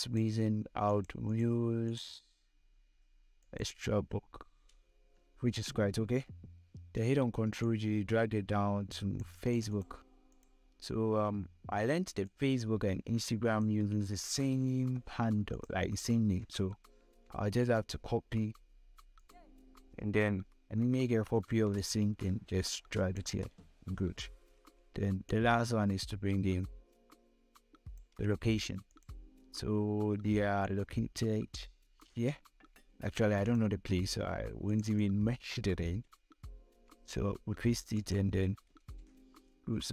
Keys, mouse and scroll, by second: 5.7 click, 6.2 ctrl+j, 7.1-14.5 shift+drag, 14.5 ctrl+c, 15.1 click, 16.7 ctrl+v, 18.7 click, 20.5 ctrl+j, 21.6-24.6 shift+drag, 23.8 ctrl+j, 24.6 ctrl+j, 24.8-32.3 shift+drag, 30.5-31.6 drag, 32.3 ctrl+c, 32.9 click, 33.7 click, 36.2 ctrl+v, 37.5 click, 39.3 ctrl+0.